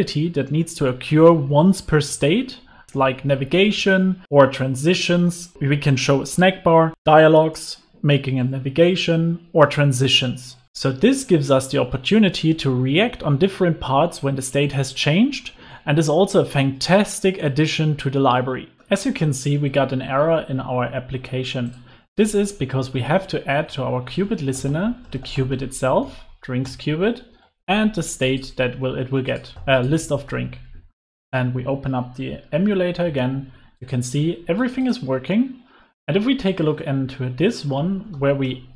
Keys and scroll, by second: 2.8 Escape, 2.9 alt+super+l, 4.2 super+s, 26.7 Return, 31.1 super+s.